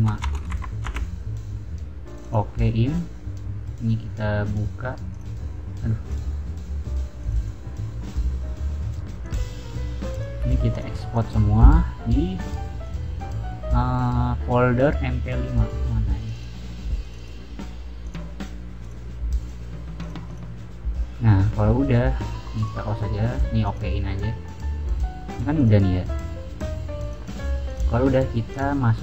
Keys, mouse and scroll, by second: 0.0-0.5 typing, 0.8 Return, 2.1 click, 3.7 click, 4.3 click, 5.0 click, 5.9 click, 7.1 click, 7.3 click, 9.1 click, 10.1 drag, 10.6 click, 11.1 click, 12.7 click, 16.1 click, 16.9 click, 17.1 click, 17.9 click, 18.7 click, 19.3 click, 19.9 click, 20.2 click, 22.5 click, 23.6 click, 25.5 click, 26.9 click, 27.6 click, 28.4 click.